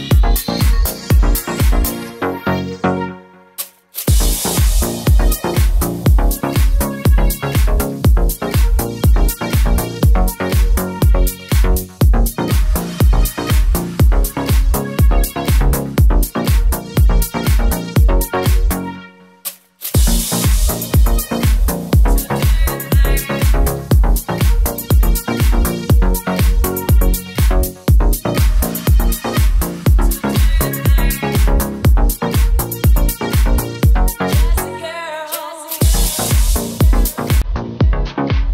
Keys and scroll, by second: 5.7 Right, 7.0 Down, 7.1 Left, 8.0 Down, 9.8 Left, 10.2 Right, 12.9 Up, 13.1 Return, 13.9 Down, 14.4 Down, 16.2 t, 17.5-19.3 typing, 18.9 Right, 21.0 Right, 21.6 Left, 22.1 super+s, 30.9 super+c, 31.0 super+v, 36.3-37.5 typing.